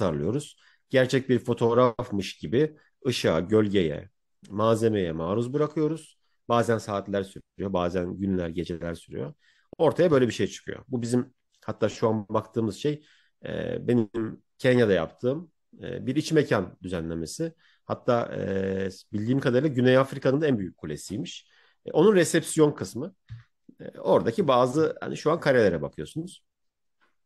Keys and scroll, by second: 13.2 Right, 24.1 Left, 24.4 Right, 25.6 Left.